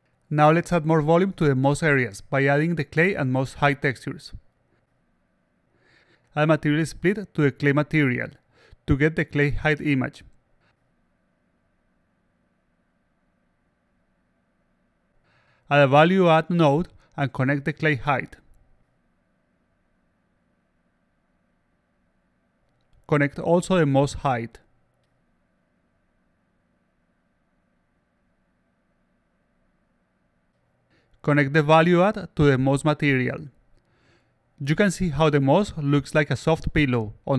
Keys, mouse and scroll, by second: 0.0 click, 1.5 click, 2.2 click, 3.4-4.7 drag, 5.5 click, 8.1-9.5 drag, 10.0-11.4 drag, 12.8-14.7 alt+drag, 15.7 click, 17.3-18.6 drag, 20.0 click, 22.6 alt+click, 23.8-25.7 drag, 27.8 click, 28.9 alt+click, 29.4 click, 29.9 click, 30.7 click, 31.9 click, 34.4-35.4 alt+drag, 35.8-36.4 alt+drag, 36.6-37.3 alt+drag.